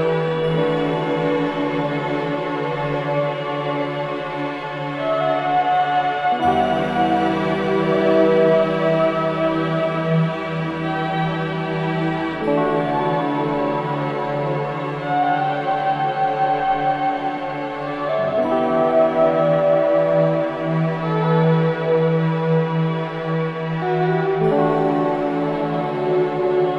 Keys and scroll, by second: 11.0 space, 15.4 space, 19.3 5, 20.5 Return.